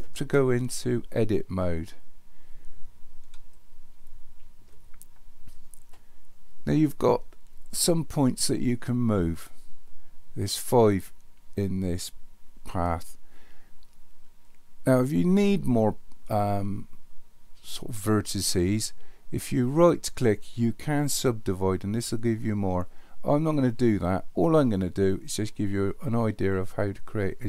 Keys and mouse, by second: 3.6-4.6 shift+middle drag, 19.8-22.6 right drag.